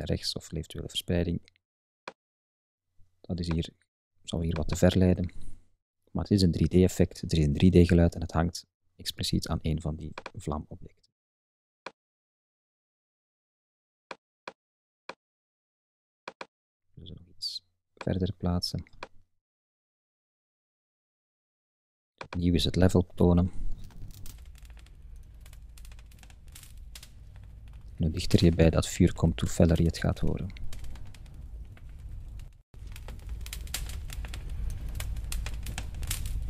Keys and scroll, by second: 25.0 Up, 25.7 Right, 25.9 Up, 26.4 Right, 26.6 Up, 28.5 Left, 28.6 Up, 29.0 Right, 29.3 Up, 29.6 Left, 29.8 Up, 30.0 Left, 30.1 Up, 30.5 Right, 30.7 Up, 31.0 Right, 31.2 Up, 31.6 Right, 31.8 Up, 32.2 Left, 32.3 Up, 32.7 Right, 32.8 Up, 33.3 Right, 33.5 Up, 33.9 Left, 34.0 Up.